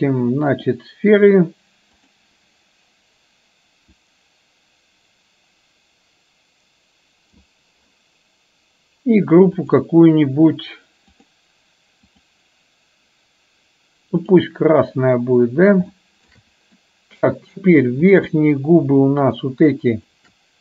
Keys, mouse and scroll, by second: 2.1 click, 4.0-7.8 drag, 14.5 drag, 16.0-16.4 shift+middle drag, 16.9 middle click, 19.3 shift+click, 20.0 shift+click.